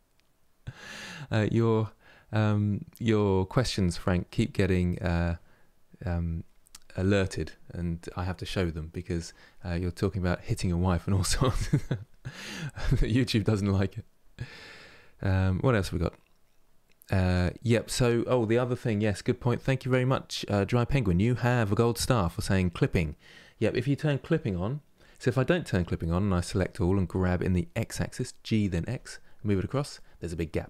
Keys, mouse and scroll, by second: 25.1-26.1 middle drag, 26.1 a, 26.8 g, 29.6 middle click, 30.4 ctrl+z.